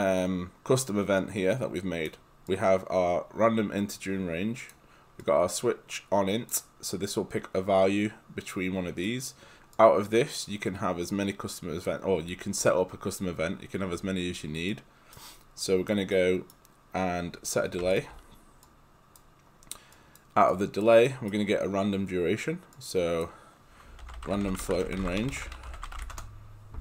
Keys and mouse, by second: 4.7 click, 9.1 right click, 9.8 click, 12.6 click, 14.7 right click, 15.6 click, 16.1 right click, 17.8 d, 17.9 click, 18.7 click, 21.1 right click, 22.8 click, 23.8-26.5 typing.